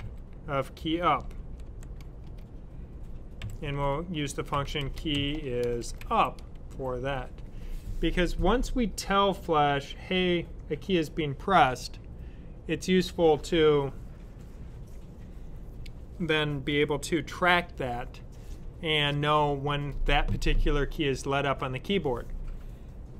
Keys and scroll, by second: 0.0-1.5 typing, 4.1-6.9 typing.